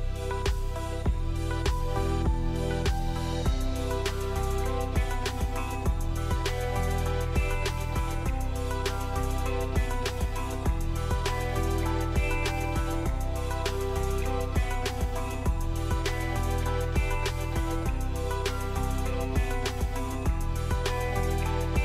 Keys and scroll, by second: 1.3 l, 2.9 Escape, 4.6 Escape, 11.4 5, 11.7 Return, 15.2-17.8 typing, 19.7 r.